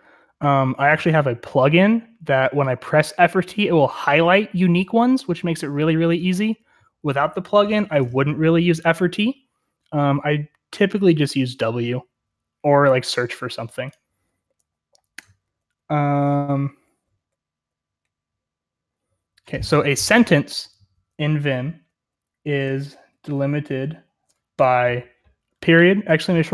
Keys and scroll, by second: 15.2-16.1 j, 16.3-18.3 j, 22.3-25.3 typing.